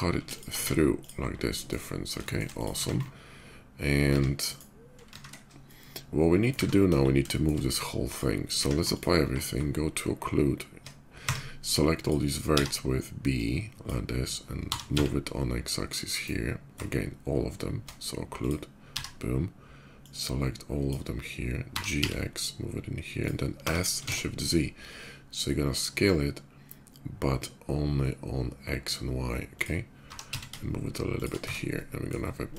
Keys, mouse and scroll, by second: 0.1 shift+click, 0.3 q, 0.7 click, 1.2 middle drag, 2.0 shift+middle drag, 2.2 shift+click, 4.1 q, 4.2 right click, 5.3-6.2 shift+middle drag, 6.6 KP_5, 7.1 middle drag, 7.9 click, 8.3 q, 8.7 ctrl+click, 9.8 Tab, 9.9 Tab, 11.7 click, 12.8 b, 13.1 click, 14.3 g, 14.6 x, 15.8 right click, 15.8 g, 16.5 Tab, 17.0 Tab, 18.0 click, 19.8 click, 19.8 b, 21.5 g, 22.5 g, 22.9 click, 23.4 s, 24.1 shift+z, 29.3 click, 30.9 shift+click, 30.9 g, 30.9 x, 31.2 Tab, 31.5-31.8 middle drag, 32.1 middle click, 32.4 shift+middle click.